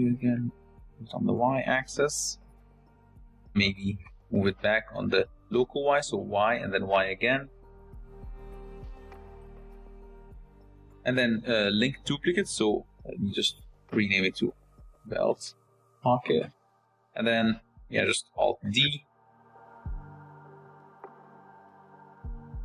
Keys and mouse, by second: 1.3 r, 2.2 g, 4.8 Tab, 5.4 g, 11.5 Tab, 12.1 shift+middle drag, 14.1-16.6 drag, 18.4 alt+d, 19.7-22.3 typing.